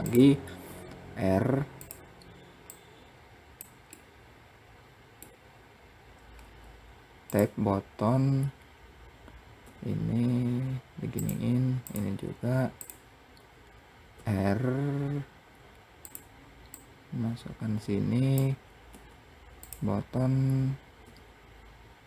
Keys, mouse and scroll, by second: 0.0 r, 2.1 click, 3.4-5.9 middle drag, 11.3 click, 13.6 r, 16.2 click, 20.4 r.